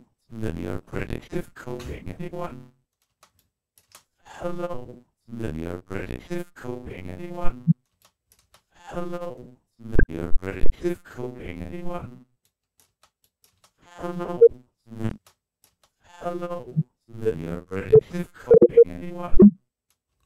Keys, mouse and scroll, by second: 2.9 space, 3.2 click, 3.7 space, 7.7 space, 7.8 click, 8.2 space, 12.2 click, 12.7 space, 13.0 click, 13.3 space, 13.3 click, 14.9-15.5 typing, 15.0 click, 15.5 click, 19.9 space.